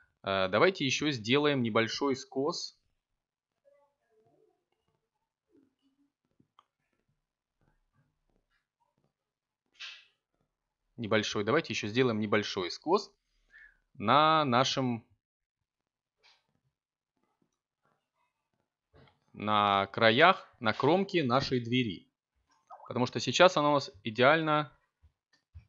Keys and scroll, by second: 14.7 Tab, 16.7 a, 17.1 ctrl+t.